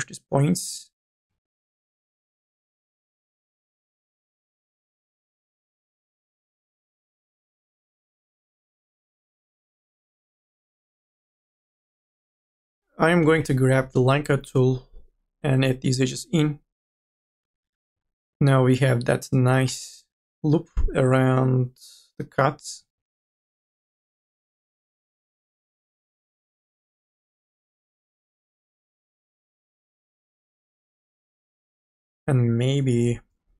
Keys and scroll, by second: 1.7 ctrl+z, 7.2 e, 10.6 2, 11.2 1, 12.1 2, 13.3 k, 17.4 e, 17.9 2, 18.1 ctrl+z, 22.9 1, 23.4 m, 23.8 o, 33.3 m.